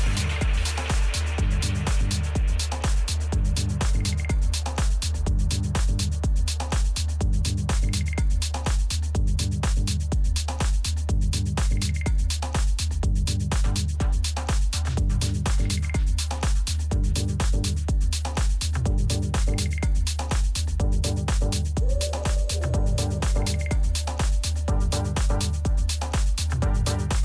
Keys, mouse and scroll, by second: 3.3 a, 3.7-4.7 middle drag, 4.7-6.7 right drag, 5.7 middle click, 6.3 a, 6.9 middle click, 6.9-8.2 right drag, 8.1 middle click, 8.2 middle click, 9.4-11.1 drag, 11.1 a, 11.8-13.6 right drag, 12.6-14.5 drag, 13.7 a, 14.4-17.5 right drag, 15.1 a, 16.3-18.1 drag, 18.5 a, 19.2-21.1 right drag, 19.8-21.6 drag, 21.0-22.4 middle drag, 22.4 a, 24.0-26.6 middle drag.